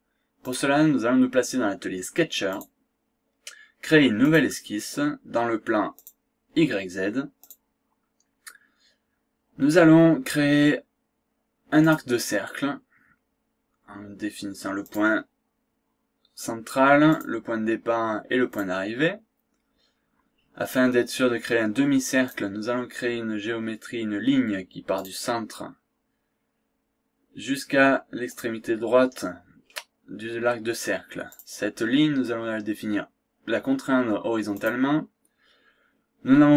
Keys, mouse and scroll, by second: 0.4 click, 2.5 click, 4.3 click, 5.9 click, 7.4 click, 8.1-9.9 scroll up 2, 11.8 click, 14.9 click, 17.3 click, 18.5 click, 19.0 scroll up 1, 19.5 scroll down 1, 19.7 scroll up 1, 22.3 click, 24.9 click, 28.3 click, 29.3 scroll up 1, 29.6 scroll down 1, 31.3 click, 34.5 click.